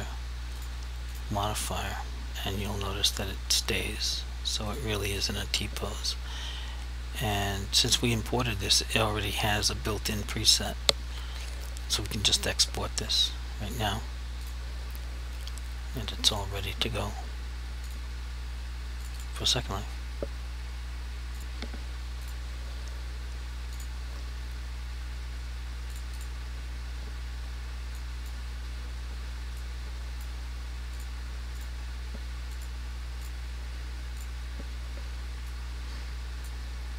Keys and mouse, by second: 0.6 click, 13.8 click, 19.2 double click, 21.4 click, 26.2 double click, 28.1 click, 29.7 click, 31.0 click, 35.6 click.